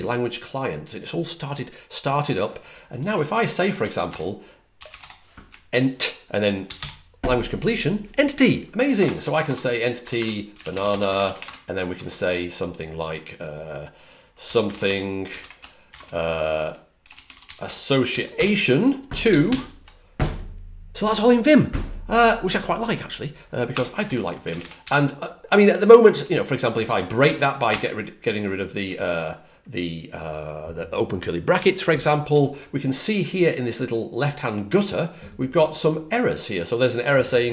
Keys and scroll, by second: 2.9 typing, 4.5-5.4 typing, 6.7 ctrl+o, 10.1-11.4 typing, 11.9 Return, 11.9 Tab, 14.1-15.8 typing, 17.4 typing, 18.3 ctrl+o, 19.4 ctrl+x, 19.4 ctrl+o, 23.7-24.5 typing, 25.8-26.5 typing, 28.5-29.2 typing, 32.2 typing.